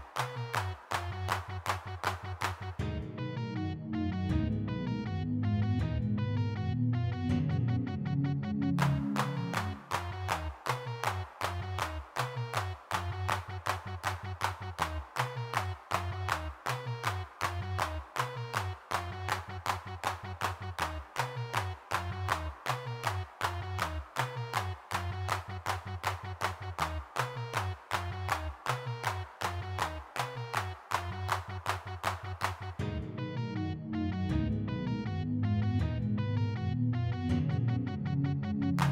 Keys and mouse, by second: 1.1 shift+c, 2.2-4.0 middle drag, 5.1-6.3 middle drag, 6.3 3, 6.5 f, 6.8 middle click, 7.4 middle click, 8.0-11.3 middle drag, 11.3 click, 11.6 shift+c, 13.3-14.7 middle drag, 15.5 3, 18.5 f, 18.9 click, 21.0 g, 21.4 f, 25.5 click, 28.5-29.7 drag, 31.6 click, 34.6 n, 38.4 0.